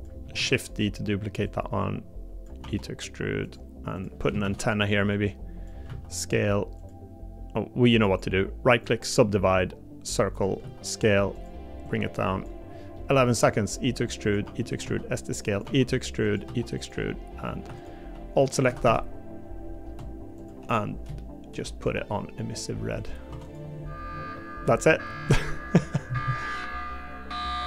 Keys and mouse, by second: 0.4 shift+d, 2.6 e, 4.4 shift+d, 5.8 s, 12.9 middle click, 13.4 e, 14.4 e, 14.8 s, 15.6 e, 16.5 e, 18.6 a, 18.8 a, 21.2 shift+middle click, 21.8 g, 23.3 Tab, 24.3 middle click, 25.1 middle click.